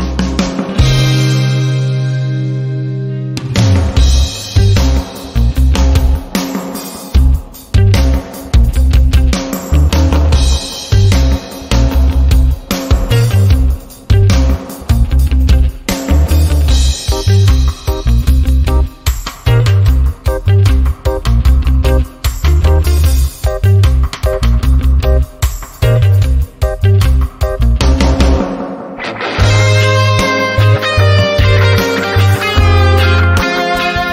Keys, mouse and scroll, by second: 5.3-6.5 typing, 8.8 Tab, 9.3-12.6 typing, 13.5-13.9 ctrl+scroll down 2, 14.4 click, 15.3 shift+click, 16.3 shift+click, 17.1 click, 18.4-19.0 ctrl+scroll down 2, 19.0 click, 19.4-19.7 ctrl+scroll up 1, 20.1 r, 20.9-21.8 click, 22.9 ctrl+alt+c, 23.2 click, 23.6 ctrl+alt+v, 24.9 ctrl+scroll up 1, 25.7-26.7 drag, 31.6-32.1 ctrl+scroll down 1, 32.5-34.1 drag.